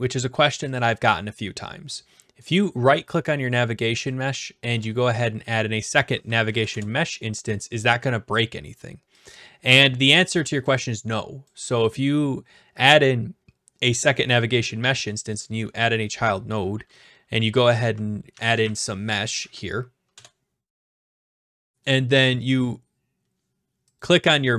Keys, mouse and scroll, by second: 0.8 click, 2.5-3.6 right drag, 4.1-5.1 drag, 6.4 Down, 6.7 Return, 10.6 click, 11.5 click, 14.3 right click, 15.4 click, 17.8-19.1 typing, 19.4 Down, 20.1 Return, 21.8-22.9 right drag, 24.0-24.5 drag.